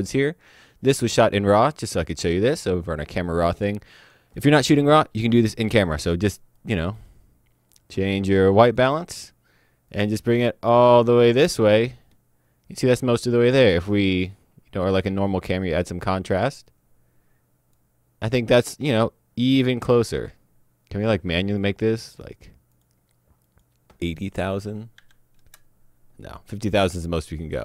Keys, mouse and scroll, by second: 1.9 click, 5.6 click, 8.8 click, 14.2 click, 19.5 click, 21.0 click, 24.4 Delete, 24.9 KP_8, 25.4 KP_Enter.